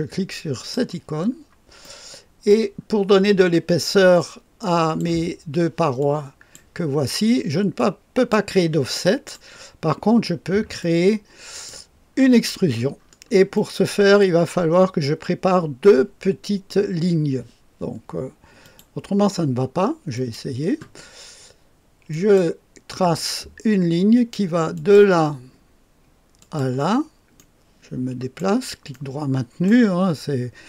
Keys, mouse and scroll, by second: 0.5 click, 1.2-1.8 scroll down 1, 1.8 right click, 2.7-4.2 scroll down 2, 4.2 click, 6.0 click, 7.7 click, 8.9 click, 9.3 right click, 10.7 click, 12.1 click, 12.2-14.1 scroll up 1, 13.5-15.8 right drag, 18.6 click, 20.1 click, 22.0 click, 24.7 click, 26.3 click, 27.3-28.4 right drag, 28.9 right click.